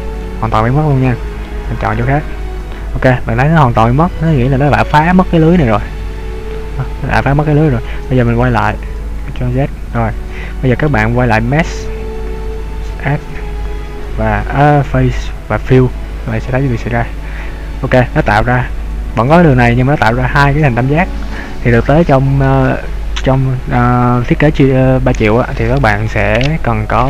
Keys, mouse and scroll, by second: 0.3 middle click, 2.2 right click, 4.1 middle click, 8.4 ctrl+z, 9.3 ctrl+z, 10.0 middle click, 17.3-18.1 scroll up 2, 18.1-20.5 scroll down 1.